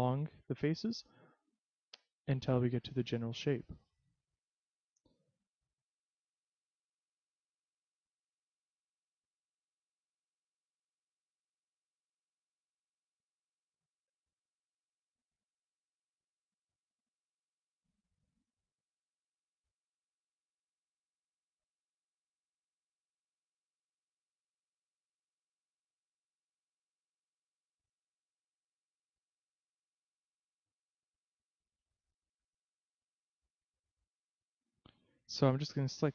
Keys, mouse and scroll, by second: 0.2 click, 1.2 s, 2.2 click, 2.8 click, 5.5 e, 7.8 click, 8.1 s, 9.4 click, 10.0 click, 12.2 e, 13.2 click, 14.2 s, 15.5 click, 16.1 click, 18.4 e, 21.1 click, 21.4 s, 23.1 click, 24.1 click, 25.7 e, 27.3 click, 28.0 s, 29.0 click, 29.6 click, 33.6 a, 33.9 b.